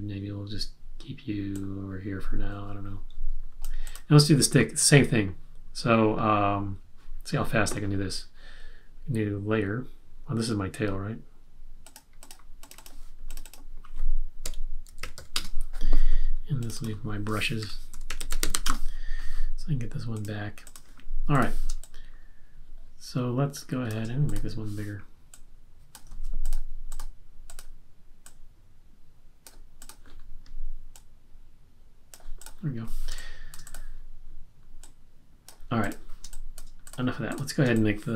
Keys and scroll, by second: 14.2-15.6 typing, 16.8-18.9 typing, 20.1 typing, 21.7 space, 26.1 super+z, 33.1 space, 36.2 space, 37.6 space.